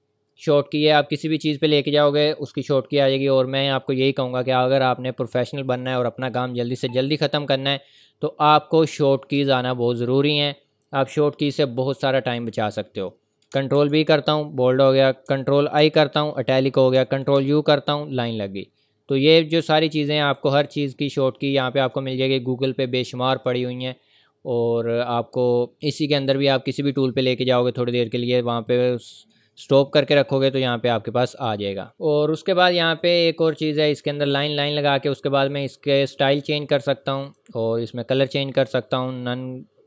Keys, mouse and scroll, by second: 13.5 ctrl+Num_Lock, 19.8 u, 19.9 click, 31.9 click, 33.0 click, 37.2 click.